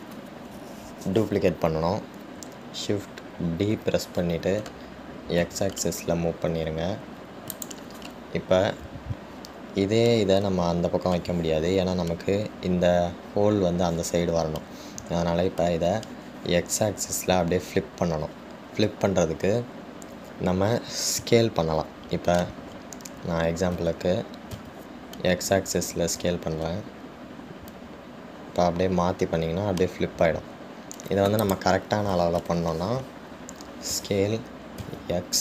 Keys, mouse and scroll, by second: 0.0-3.1 middle drag.